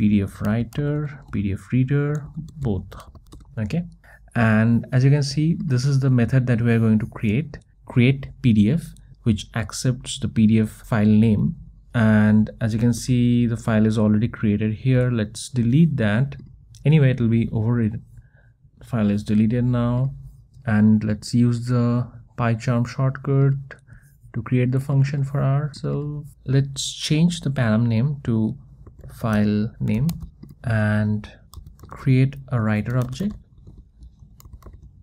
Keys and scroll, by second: 0.1 Return, 3.4 Return, 4.0 Return, 16.1 Delete.